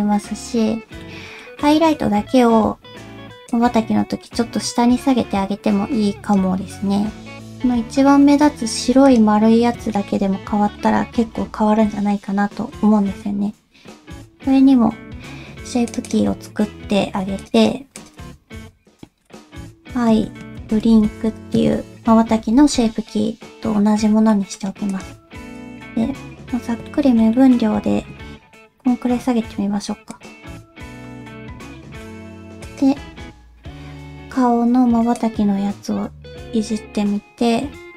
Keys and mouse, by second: 1.0 middle click, 1.6 middle click, 3.6-6.3 drag, 7.5 /, 9.0 click, 9.9 middle click, 12.2-14.0 middle drag, 15.9 click, 16.0 click, 17.4 click, 17.5 click, 18.1-21.5 drag, 24.3 middle click, 24.9 click, 26.1 Tab, 26.8 middle click, 27.3 middle click, 27.9 g, 31.0 middle click, 31.5 Tab, 32.6 click, 35.1-37.9 drag.